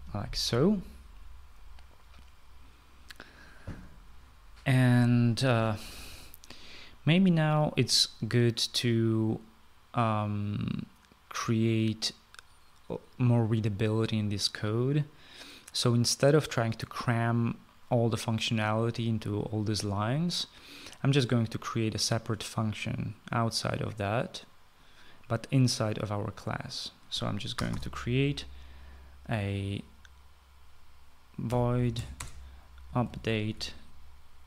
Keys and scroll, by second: 0.0-0.6 typing, 28.5 Return, 28.9 Return, 32.2-34.4 typing.